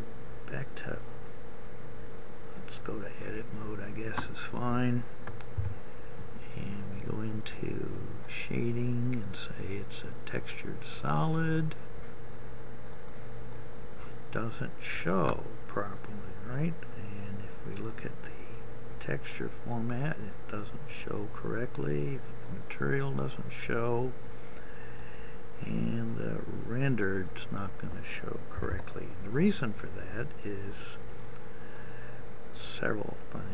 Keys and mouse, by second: 6.2 n, 18.6 click, 29.1 Escape, 29.9 Escape.